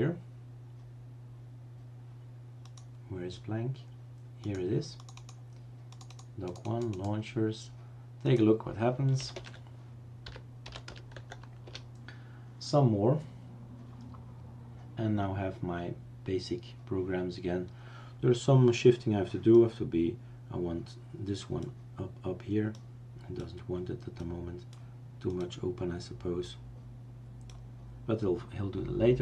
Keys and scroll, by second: 9.4-11.3 typing, 11.6 Return.